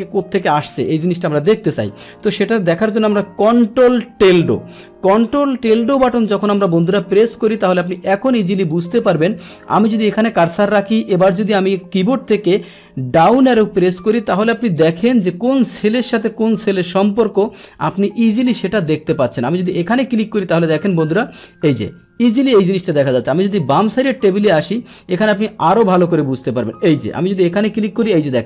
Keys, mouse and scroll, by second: 5.8-8.7 drag, 9.7 click, 13.3 Down, 14.1 Down, 15.1 Down, 15.9 Down, 16.7 Down, 18.1 Up, 18.1 Up, 19.0 Up, 19.4 Down, 19.4 Right, 19.9 Down, 21.8 Right, 22.0 Down, 22.3 Right, 22.6 Left, 24.4 right click, 24.6 right click, 25.3 Right, 25.6 Right, 26.8 click, 27.9 Down.